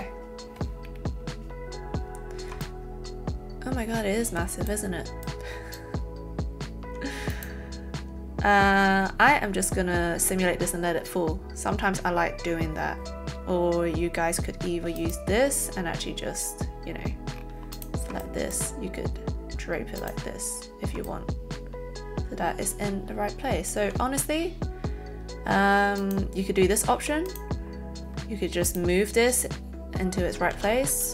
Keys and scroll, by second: 30.5 ctrl+z, 31.0 ctrl+z.